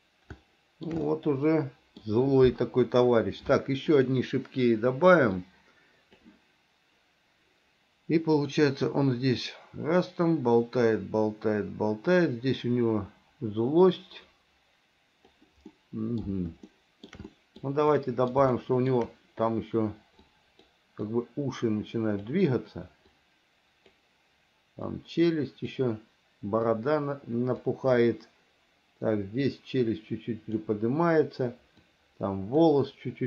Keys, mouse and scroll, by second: 0.6 shift+middle click, 1.3 middle click, 4.1 click, 5.7 click, 8.6 click, 9.1-15.6 drag, 15.9 middle click, 16.9 shift+middle click, 17.5 middle click, 18.2 middle click, 18.7 shift+middle click, 20.6 click, 21.3-22.5 drag, 23.3 click, 25.1 click, 26.9-27.9 drag, 29.7-30.8 drag, 32.1 click.